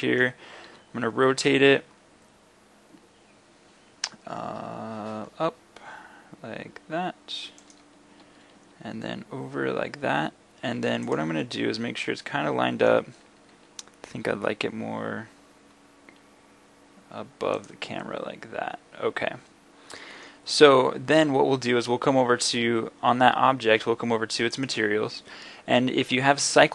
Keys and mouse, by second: 0.1 middle click, 0.7 r, 7.8-11.2 drag, 8.2 r, 11.5 middle drag, 11.9-12.3 drag, 12.8-13.5 drag, 13.6 g, 17.7 middle click, 18.6 middle click.